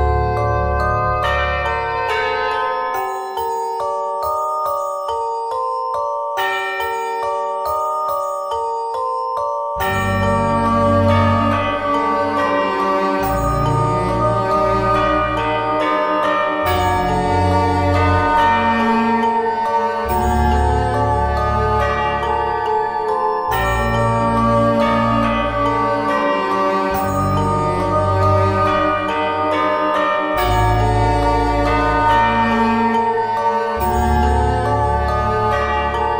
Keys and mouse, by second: 0.1 z, 0.6 ctrl+Tab, 2.9 right click, 3.2 i, 5.6 click, 6.5 x, 7.3 Tab, 7.6-8.7 middle drag, 9.9 Tab, 11.0 ctrl+Tab, 15.4 ctrl+z, 15.6 ctrl+z, 15.8 ctrl+z, 16.0 ctrl+z, 16.2 ctrl+z, 16.3 ctrl+z, 16.6 ctrl+z, 16.7 ctrl+z, 16.9 ctrl+z, 17.1 ctrl+z, 17.8-19.1 drag, 19.2 ctrl+Tab, 19.8 click, 20.3 x, 21.1 Tab, 21.8 KP_1, 26.4 click, 26.6 shift+a, 27.7 s, 30.5 Tab, 31.5 ctrl+Tab, 35.4 o, 35.9 KP_1.